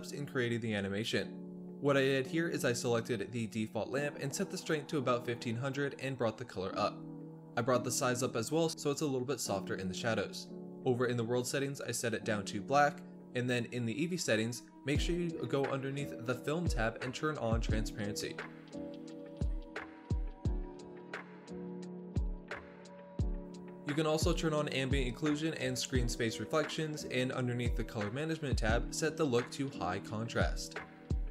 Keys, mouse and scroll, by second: 1.5 middle click, 1.9 click, 3.2 click, 3.7 KP_0, 4.3 click, 4.8 z, 4.9 middle click, 5.0 scroll up 1, 5.1 middle click, 5.4-6.6 scroll down 1, 6.6 click, 7.1 KP_0, 7.6 middle click, 7.8-8.1 scroll up 1, 8.1-9.4 drag, 9.4 scroll down 1, 9.5 middle drag, 9.8-10.1 scroll up 2, 10.1-11.0 drag, 11.5-11.9 middle drag, 11.9-12.9 drag, 13.0 click, 13.2-13.5 middle drag, 13.5 ctrl+alt+KP_0, 13.8 scroll up 2, 14.1 click, 14.3 click, 14.5-17.8 typing, 16.2 scroll up 1, 16.6 scroll down 1, 17.0 scroll up 1, 18.4-18.8 scroll down 3, 18.5 middle drag, 18.8 click, 19.0-20.6 typing, 19.8 middle click, 20.5 scroll up 3, 21.5 scroll down 2, 21.6-22.8 scroll up 2, 21.9 space, 22.8 space, 23.2 shift+middle drag, 23.2 scroll down 4, 23.5-23.9 scroll up 6, 23.9-24.6 shift+middle drag, 24.6 scroll down 2, 24.8-25.5 scroll up 2, 25.5-25.9 drag, 26.2-27.0 shift+middle drag, 27.0 drag, 27.2 scroll down 2, 27.4-28.1 drag, 28.1 shift+middle click, 28.7-29.7 drag, 29.7 scroll down 2, 30.0-30.3 scroll up 8, 30.3 ctrl+s, 30.5-31.3 scroll down 1.